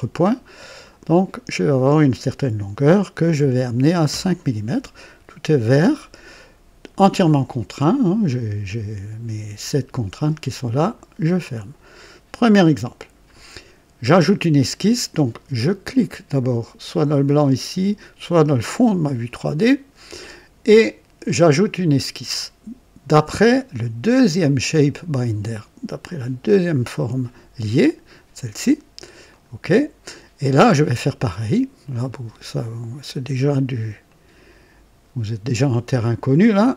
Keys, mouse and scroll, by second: 0.8 click, 3.3 KP_5, 4.0 Return, 8.6-10.2 drag, 10.8 click, 17.2 click, 18.5 click, 21.4 click, 26.3 click, 29.2 click, 31.8 click, 34.0 click, 36.6 click.